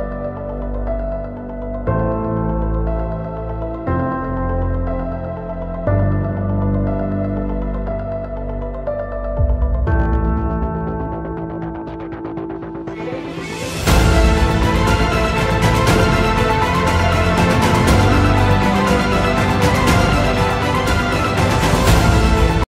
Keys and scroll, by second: 1.1 shift+F2, 5.6 F3, 15.8 Escape, 20.2 shift+F2, 21.6 F9.